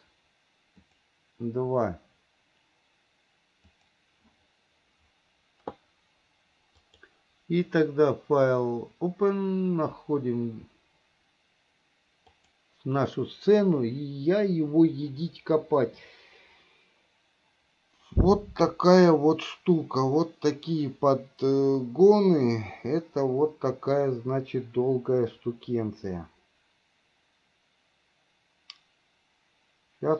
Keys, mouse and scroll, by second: 7.0-30.1 drag.